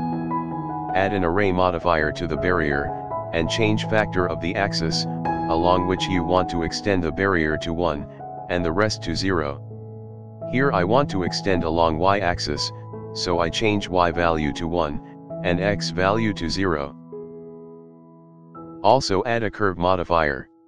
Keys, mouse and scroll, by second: 2.1-5.1 drag, 6.5-8.7 drag, 9.4-10.5 scroll down 3, 10.5-11.2 scroll down 1, 11.5-12.1 shift+middle drag, 13.5-14.2 middle drag, 14.5 shift+middle drag, 15.7-18.5 drag, 18.5 scroll down 2, 19.7-20.1 scroll up 2, 20.1-20.6 drag.